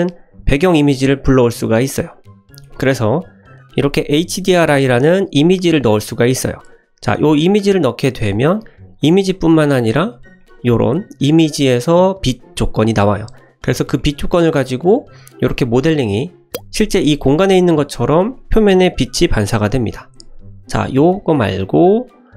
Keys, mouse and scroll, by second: 9.5 click, 10.3 scroll down 1, 10.4-10.8 middle drag, 14.0 middle click, 14.5-14.8 middle drag, 15.0-15.5 scroll up 3, 15.5-16.4 middle drag, 18.3-19.5 middle drag, 20.5 click.